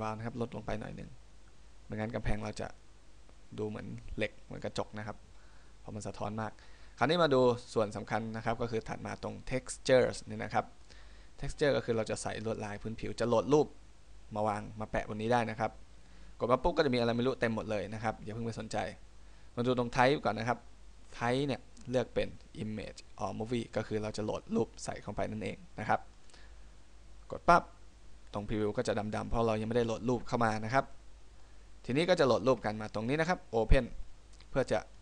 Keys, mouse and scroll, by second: 1.1 click, 11.0 click, 21.2 click, 28.6 middle click, 31.1 middle click.